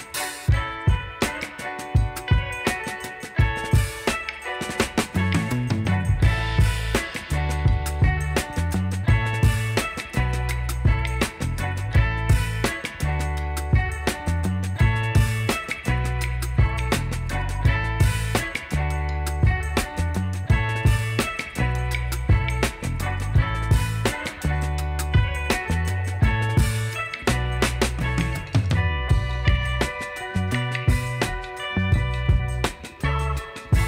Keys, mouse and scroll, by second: 5.8 alt+scroll up 1, 7.6 alt+scroll down 1, 7.7 alt+middle click, 11.0 ctrl+d, 16.3 right click, 27.6 shift+click, 31.7 double click.